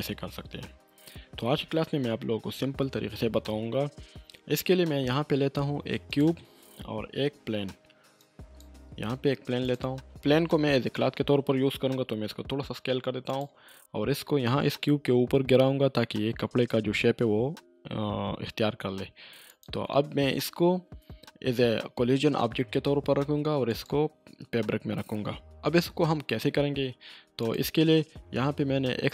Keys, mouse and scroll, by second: 0.6-2.4 scroll up 1, 4.4 click, 4.9 shift+a, 6.1 click, 7.2 shift+a, 8.2-8.8 drag, 11.9 click, 12.0 s, 13.3 click, 19.5 click, 23.7 click, 27.4 click.